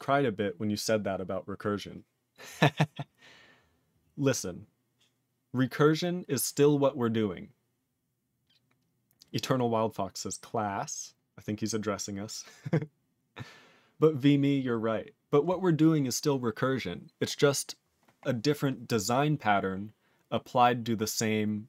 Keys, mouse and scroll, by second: 2.8 scroll down 1, 3.6-4.3 scroll down 2, 4.3 scroll up 5, 12.8 scroll down 7, 15.0 scroll down 2, 18.2-21.6 scroll down 1.